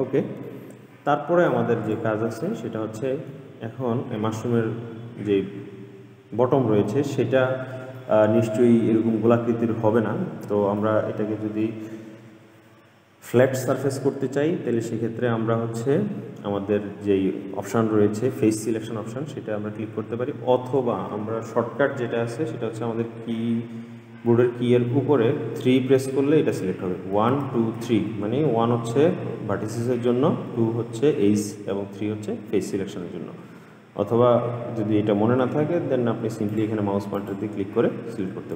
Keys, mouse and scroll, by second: 0.6-2.0 middle drag, 2.0 click, 2.6-3.8 middle drag, 3.8-5.4 scroll up 4, 5.4-7.0 scroll up 1, 8.1-11.2 middle drag, 25.7 3, 27.3 1, 27.6 2, 27.9 3, 29.2 1, 30.2 1, 30.9 2, 32.1 3, 36.7 click, 37.3 click.